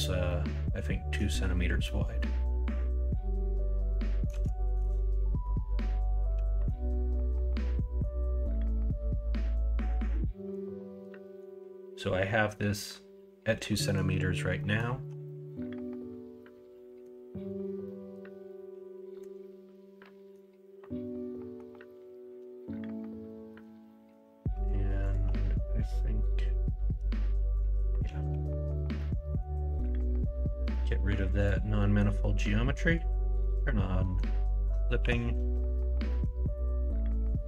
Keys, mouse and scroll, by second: 0.2-1.1 middle drag, 1.8-4.2 middle drag, 4.5 shift+middle drag, 5.1 middle drag, 6.3 middle click, 7.1 middle drag, 7.8 middle click, 10.2 middle click, 11.2 middle click, 13.8 middle drag, 14.5 middle drag, 15.2-17.0 middle drag, 17.8-19.2 middle drag, 19.7-20.3 middle drag, 20.8-21.5 middle drag, 23.2-23.5 middle drag, 23.8 middle drag, 28.2 ctrl+a, 28.7 middle click, 28.9 Tab, 29.2 middle click, 29.8 3, 30.6 x, 31.7 middle click, 34.0 middle click, 34.9 3.